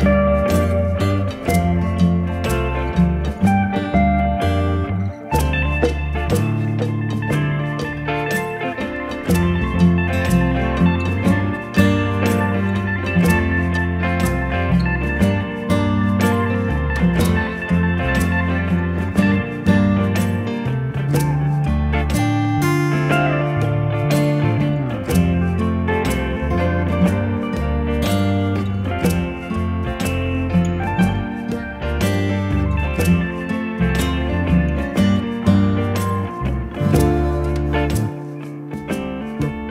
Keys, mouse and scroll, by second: 3.0 Return, 4.8 click, 7.6 ctrl+z, 9.2 ctrl+alt+z, 10.9 click, 15.1 click, 17.1 right click, 17.5 click, 19.5 right click, 21.2 click, 22.0 right click, 24.0 click, 34.9 click.